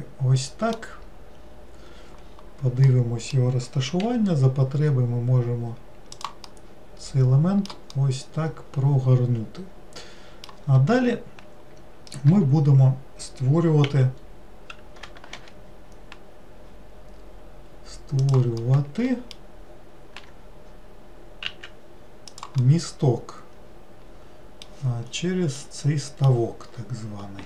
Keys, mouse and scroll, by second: 1.3-2.3 scroll up 2, 2.3 scroll up 4, 2.9-4.1 middle drag, 4.1 r, 6.5-11.0 middle drag, 18.7-20.3 middle drag, 20.3 g, 22.7-26.8 middle drag, 26.8-27.4 scroll down 2.